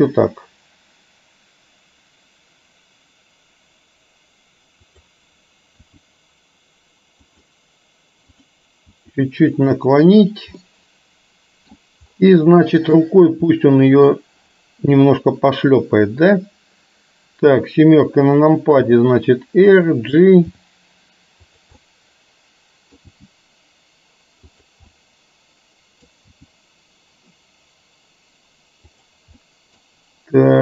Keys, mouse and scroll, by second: 4.9 click, 6.1 r, 8.9 r, 10.7-11.9 middle drag, 13.6-14.2 middle drag, 17.4 KP_7, 18.9 r, 20.6 g, 21.8-23.1 middle drag, 23.2 g, 24.9-26.2 middle drag, 26.4 g, 29.4-29.8 middle drag, 29.4 scroll up 1.